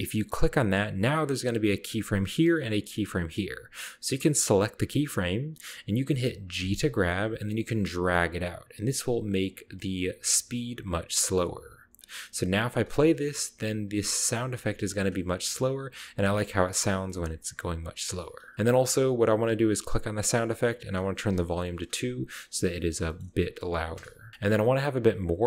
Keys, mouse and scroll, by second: 1.9 drag, 4.7 click, 5.7-6.6 scroll down 1, 6.6 g, 9.4-10.8 scroll down 1, 10.2 g, 11.9 click, 12.5 click, 12.9-13.4 right drag, 12.9 space, 13.8-15.1 drag, 14.0 g, 14.3 right drag, 14.8-15.1 scroll up 1, 15.1 scroll down 1, 15.8-16.8 drag, 16.2 g, 16.7-19.6 scroll up 2, 17.1-17.8 middle drag, 18.5 ctrl+alt+Left, 20.9 click, 21.4 click, 21.4 2, 23.1 middle click, 23.2 middle click, 23.2-24.1 scroll up 1, 24.4 ctrl+middle click, 24.4-25.3 ctrl+scroll up 4.